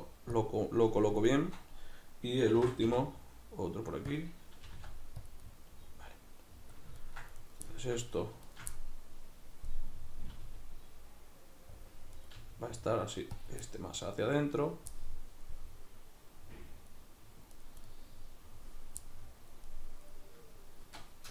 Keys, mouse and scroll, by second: 0.4 click, 1.3-4.2 shift+middle drag, 2.5 shift+d, 4.2 click, 4.7 g, 5.3 click, 5.4-7.4 middle drag, 7.4 right click, 7.7-8.5 middle drag, 8.5 shift+right click, 8.8-11.9 middle drag, 10.4 g, 11.9 click, 12.2 right click, 12.4 g, 13.5 click, 13.7-17.6 middle drag, 17.6 right click, 17.9-21.3 middle drag.